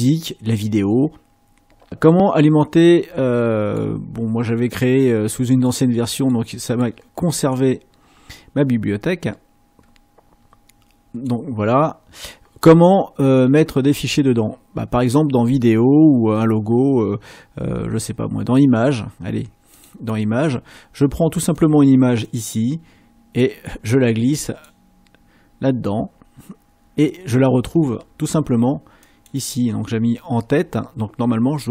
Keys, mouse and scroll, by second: 2.1 click, 3.6 click, 21.6 click, 22.2-24.9 drag, 25.9 middle click, 29.1 click, 30.6-31.7 scroll up 2.